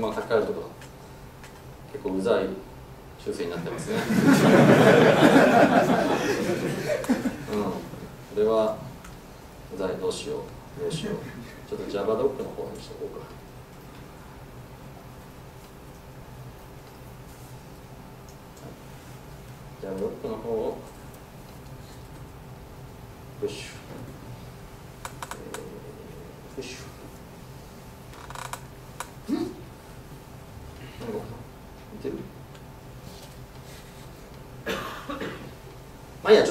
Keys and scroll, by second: 5.0 Escape.